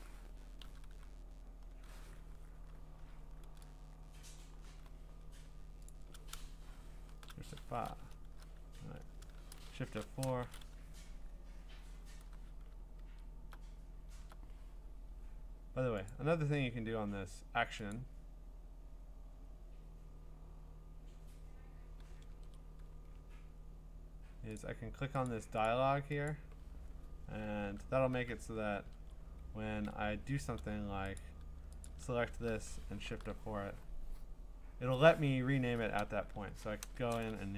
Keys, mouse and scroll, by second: 0.6 ctrl+i, 1.7 ctrl+i, 3.2 scroll, 3.4-3.9 scroll down 9, 3.9-4.7 scroll up 10, 5.9 ctrl+click, 5.9 scroll, 7.1 F5, 8.7 Escape, 9.8 F4, 13.0 alt+Tab, 14.2 alt+Tab, 16.2 click, 16.5 middle click, 16.7 middle click, 17.9 click, 18.7 middle click, 19.4 middle click, 19.5 middle click, 19.7 middle click, 19.8 middle click, 19.9 middle click, 22.3 ctrl+Tab, 22.9 scroll, 23.6 scroll, 25.3 click, 25.7 click, 26.3 click, 27.6 ctrl+Tab, 28.1 ctrl+Tab, 28.7 ctrl+Tab, 29.7 ctrl+Tab, 31.2 click, 31.9 ctrl+click, 33.0 F4, 36.5 Right, 36.8 BackSpace.